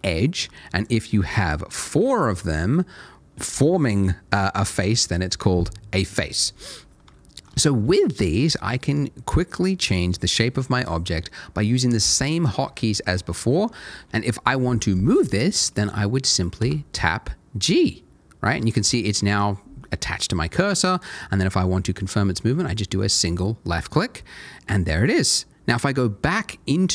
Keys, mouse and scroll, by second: 1.7 shift+click, 6.6 scroll down 1, 7.2 shift+middle click, 8.0-9.8 scroll up 1, 9.8 click, 13.0 middle click, 16.6 g, 23.1 click, 24.6 middle click.